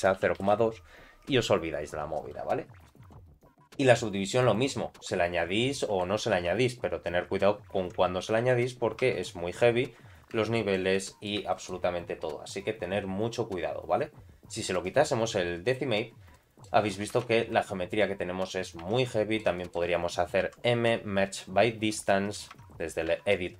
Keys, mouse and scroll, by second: 2.8-3.2 scroll up 4, 4.4 click, 5.3-5.9 scroll down 3, 5.8 middle click, 7.0 ctrl+1, 8.5 ctrl+2, 9.1 ctrl+3, 10.4 shift+middle click, 10.9 middle click, 11.5 shift+middle click, 14.8 click, 16.3 middle click, 16.8-17.4 scroll up 2, 17.4 Tab, 17.7 shift+middle click, 18.4-19.1 scroll down 3, 19.1 Tab, 19.1 middle click, 19.6 shift+middle click, 20.4 m, 22.8 Tab, 23.1 a.